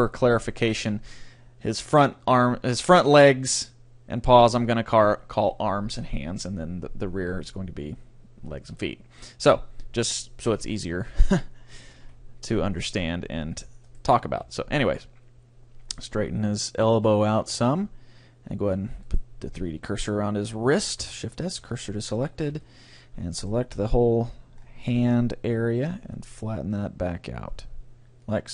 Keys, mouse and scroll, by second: 12.1 c, 13.9-15.7 drag, 14.4 r, 17.7-19.5 drag, 19.1-20.7 right drag, 21.0 shift+s, 22.6 c, 23.4-25.2 drag, 23.8 r, 28.4-28.5 drag.